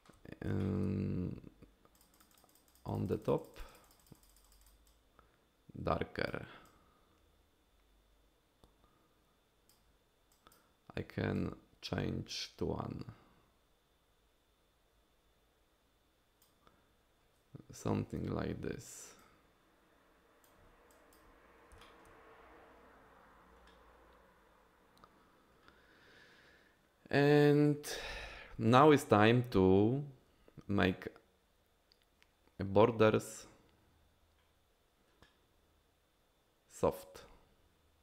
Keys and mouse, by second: 0.6 shift+click, 1.9 click, 2.1 click, 2.3 click, 2.5 click, 2.7 click, 2.9 click, 3.0 click, 3.2 click, 3.4 click, 3.5 click, 3.7 click, 3.8 click, 4.0 click, 4.1 click, 4.4 click, 4.6 click, 4.9-6.3 drag, 6.6-9.7 drag, 10.3 click, 11.3-16.4 drag, 18.1 ctrl+z, 19.2-20.4 drag, 20.9 click, 21.8 shift+click.